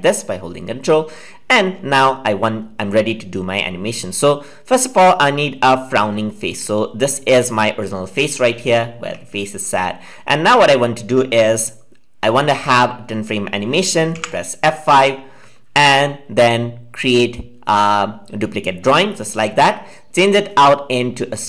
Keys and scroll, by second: 14.1 F5.